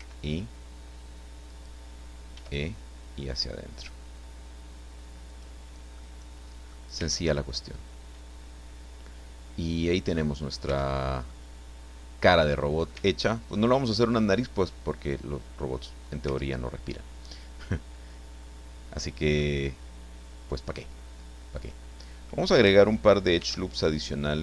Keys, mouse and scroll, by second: 0.0 i, 1.5 click, 2.3 e, 5.3 click, 5.8 scroll down 1, 6.0 middle click, 7.2 Tab, 7.4-10.3 middle drag, 10.3-11.2 scroll up 1, 10.6 Tab, 11.2-13.0 middle drag, 13.0 Tab, 13.2 scroll down 1, 13.5-16.4 drag, 16.4 Tab, 19.3-22.4 drag, 23.4 ctrl+r.